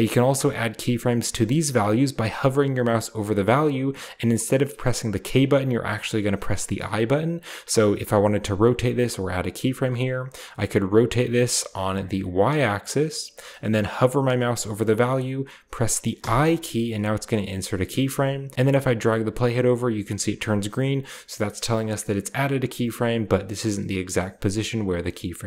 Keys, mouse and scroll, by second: 10.7 click, 11.4 right click, 11.8 click, 16.0 i, 18.6-19.3 drag, 22.9 drag, 24.8-25.4 drag.